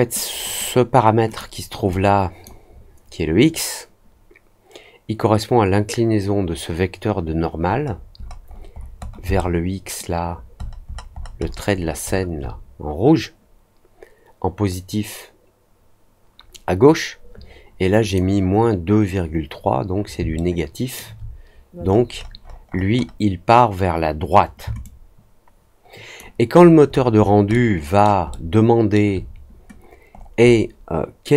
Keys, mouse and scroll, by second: 0.4 click, 1.2 click, 1.8 click, 7.8 middle click, 8.1-8.6 scroll down 4, 8.9 scroll down 2, 9.3 alt+middle click, 10.2 alt+scroll down 2, 10.5-12.2 alt+scroll up 6, 18.0 click, 20.3 alt+middle click, 21.8-22.3 scroll up 2, 22.3 middle click, 22.7 middle click, 22.9 middle click, 24.7-26.1 alt+drag, 26.5-27.5 alt+scroll up 4, 27.5 alt+middle click, 28.2 alt+middle click, 30.1-30.5 scroll up 2.